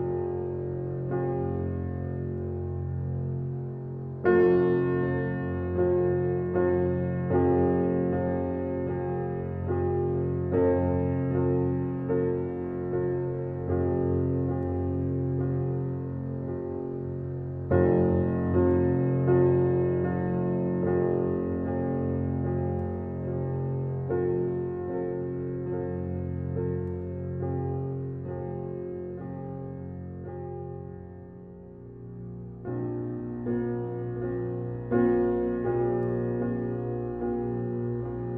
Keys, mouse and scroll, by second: 5.9 Return, 14.4 click, 20.8 click, 24.6 ctrl+click, 28.3 ctrl+shift+i, 32.3 alt+BackSpace, 34.5 click, 36.5 alt+click.